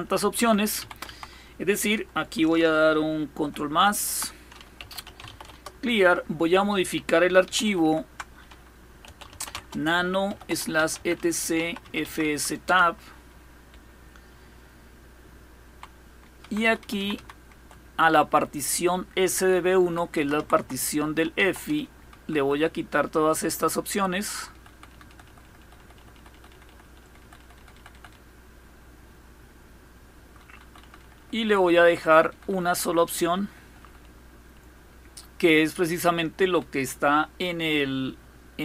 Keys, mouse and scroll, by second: 0.0 Up, 0.4 Down, 0.7 Down, 4.1-5.4 typing, 7.1 ctrl++, 7.3 ctrl++, 7.5 ctrl++, 8.4-12.3 typing, 13.3 Down, 14.0 Down, 16.1 Up, 16.1-19.6 typing, 19.8 Right, 20.1 Right, 20.2 Right, 20.7-22.3 typing, 22.4 Delete, 22.6 Delete, 22.7 Delete, 22.9 Delete, 23.1 Delete, 23.3 Delete, 23.5 Delete, 23.6 Delete, 23.8 Delete, 24.0 Delete, 24.2 Delete, 24.4 Delete, 24.6 Delete, 24.8 Delete, 24.9 Delete, 25.1 Delete, 25.3 Delete, 25.4 Delete, 25.6 Delete, 25.8 Delete, 26.0 Delete, 26.2 Delete, 26.3 Delete, 26.5 Delete, 26.7 Delete, 26.9 Delete, 27.1 Delete, 27.2 Delete, 27.4 Delete, 27.6 Delete, 27.8-30.1 Delete, 30.3 Delete, 30.5 Delete, 30.7 Delete, 30.8 Delete, 31.0 Delete, 31.2 Delete, 31.4 Delete, 31.6 Delete, 31.8 Delete, 32.0 Delete, 32.2 Delete, 32.3 Delete, 32.5 Delete, 32.7 Delete, 32.9 Delete, 33.1 Delete, 33.3 Delete, 33.5 Delete, 33.7 Delete, 33.9 Delete, 34.2 Delete, 34.5 Delete, 34.7 Delete, 35.5 Delete, 36.0 Delete.